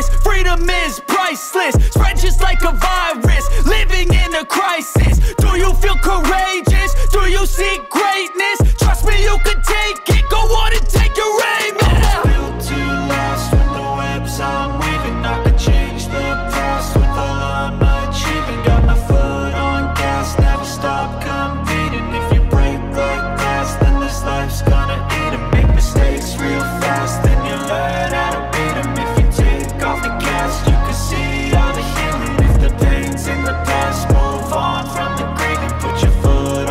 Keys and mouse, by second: 0.0 middle click, 0.2 middle click, 0.5 shift+middle click, 0.6 shift+middle click, 0.8 click, 1.2-3.7 drag, 5.2-7.2 drag, 7.7 click, 8.3 middle drag, 9.1 space, 15.8 space, 16.2 middle drag, 16.6 shift+middle drag, 16.9-17.3 middle drag, 17.6 click, 17.7 drag, 19.5 click, 19.6 space, 21.3-23.1 drag, 23.9 shift+middle click, 24.2 click, 25.6 click, 26.5-27.1 drag, 27.2 space, 27.7 click, 27.8 middle drag, 28.3 click, 28.8-29.9 drag, 31.4 space, 32.8 middle drag, 33.8 click, 34.2 shift+middle drag, 35.3 click, 35.9 shift+click.